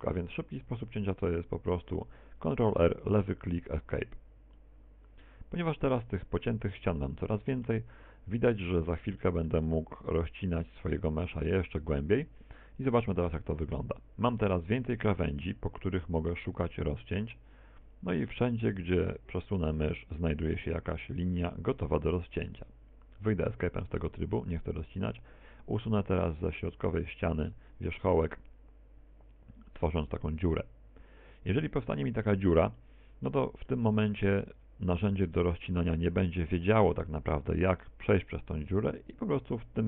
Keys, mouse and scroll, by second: 1.0 ctrl+r, 4.5 middle click, 6.5 ctrl+r, 7.7 middle click, 9.2 middle click, 9.7 middle click, 13.9 ctrl+r, 25.0 right click, 26.5 middle click, 27.5 x, 31.9 z, 32.8 middle click, 33.7 middle click, 34.6 z, 35.1 middle click, 36.1 middle click.